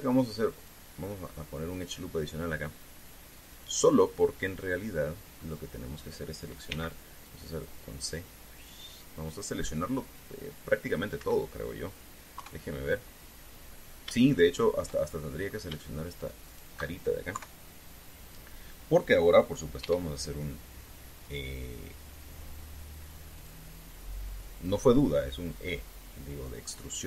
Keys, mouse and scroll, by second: 0.3 ctrl+r, 1.3 click, 2.5 click, 4.1 click, 5.1-6.3 middle drag, 7.5 c, 8.0-11.9 drag, 11.9 Escape, 13.1 KP_3, 15.1-16.4 shift+middle drag, 17.2 shift+right click, 18.1 KP_3, 20.5 e, 24.1 click.